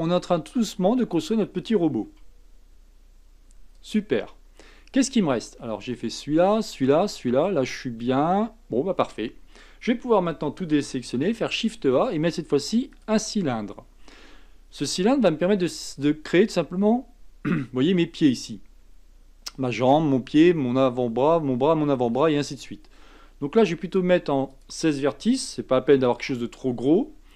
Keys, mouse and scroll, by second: 2.0 s, 4.3-7.8 scroll down 4, 10.3 a, 11.2 shift+a, 14.9-17.9 shift+middle drag, 24.5-27.3 drag.